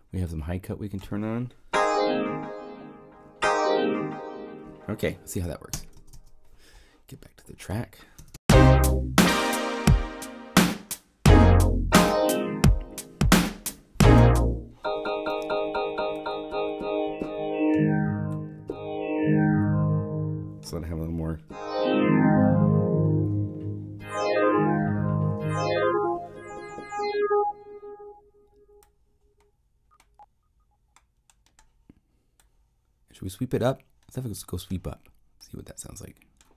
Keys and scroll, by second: 5.7 Home, 5.9 0, 8.1 0, 8.3 Home, 14.1 0.